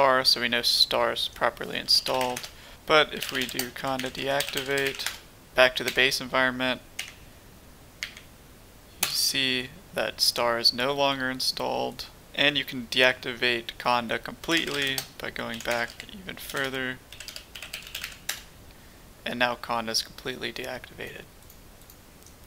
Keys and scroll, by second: 1.6-5.8 typing, 7.0 typing, 8.0 typing, 9.0 typing, 14.1-18.7 typing.